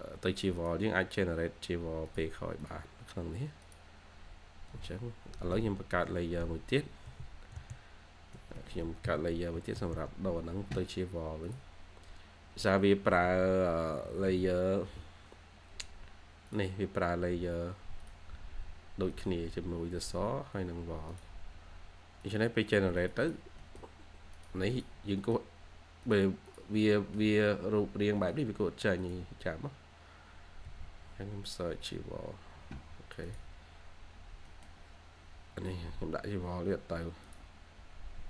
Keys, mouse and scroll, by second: 4.6 middle click, 5.2 Escape, 5.4 Escape, 6.1 typing, 8.2 Escape, 8.5 Escape, 8.9 typing, 13.5-14.7 typing, 22.5-22.9 scroll up 1, 22.9 typing, 23.1 double click, 23.4 scroll up 1, 23.5 middle click, 24.6 double click, 24.9 scroll down 1, 25.1 middle click, 26.4 double click, 26.9 middle click, 27.1-27.8 scroll up 1, 27.8-28.1 scroll down 1, 28.1 middle click, 34.1 scroll down 1, 34.4 middle click, 34.9-35.9 scroll down 1, 36.4 Escape, 36.6 Escape, 36.8 scroll up 1.